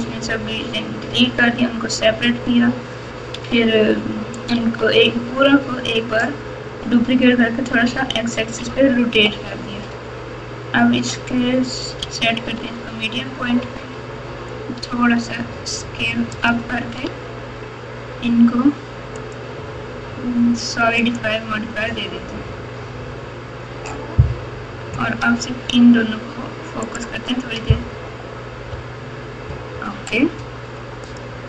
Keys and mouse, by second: 3.3 Tab, 4.5 Tab, 13.6 s, 17.0 Tab, 19.2-21.2 drag, 26.8 shift+click.